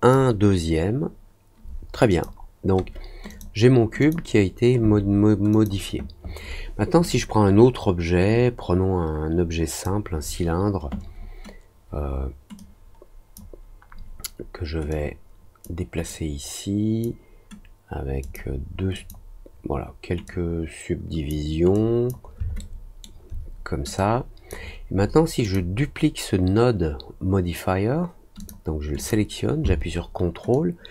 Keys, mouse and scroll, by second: 2.0 click, 3.2 click, 3.9 click, 5.5 click, 7.0-9.8 drag, 12.5 click, 14.8 click, 16.0 click, 18.2 click, 18.9 click, 20.2 click, 21.7 click, 23.9 click, 25.4 click, 28.3 click, 28.9 click, 30.5-30.9 ctrl+drag.